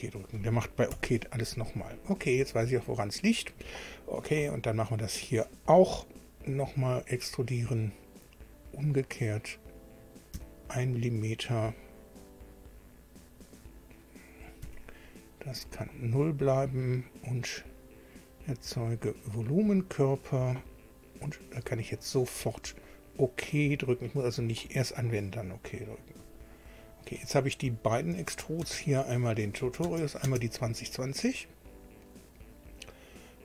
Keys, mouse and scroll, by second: 0.0 click, 0.9 Delete, 3.5 click, 6.7 click, 8.7 click, 9.9 click, 10.4 1, 11.8 scroll down 1, 12.9 scroll up 1, 14.6 0, 15.6 click, 17.0 click, 18.7 click, 20.6 click, 21.8 click, 23.7 click, 26.2 click, 27.8 click, 28.1 space, 28.6 space, 29.4 click, 29.8 space, 30.2 space.